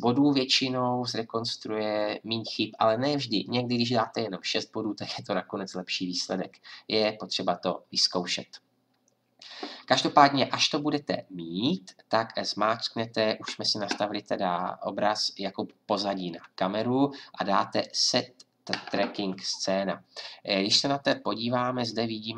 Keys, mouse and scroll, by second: 17.8-22.3 drag.